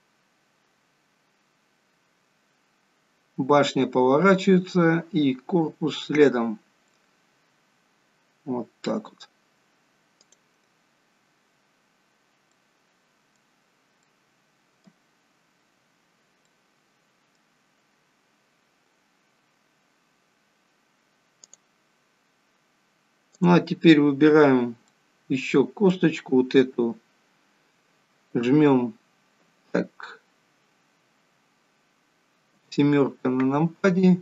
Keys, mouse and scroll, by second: 1.0 scroll down 1, 10.5 click, 11.4-12.1 scroll down 1, 12.1-12.5 scroll down 1, 12.5 middle click, 13.6 scroll down 2, 14.0 middle click, 15.8-16.5 scroll up 1, 16.5 middle click, 16.5-17.3 scroll up 1, 21.4 click, 23.2 click, 24.4 scroll down 2, 24.9 middle click, 32.6 KP_7, 33.8-34.2 scroll down 2.